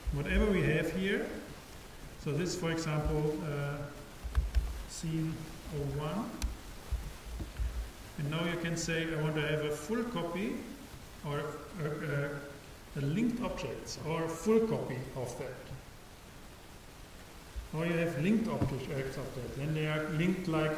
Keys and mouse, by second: 1.6-4.1 drag, 8.5-10.2 drag.